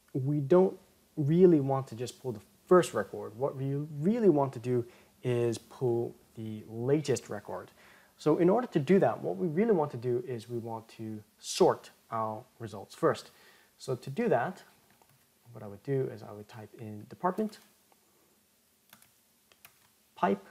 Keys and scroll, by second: 19.6 ctrl+shift+m.